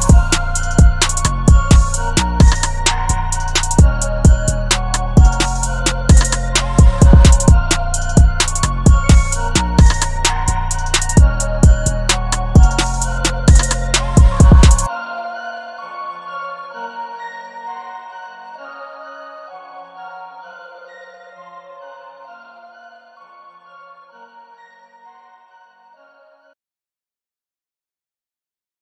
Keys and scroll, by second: 0.0-0.5 typing, 12.0 super+t, 15.3 v.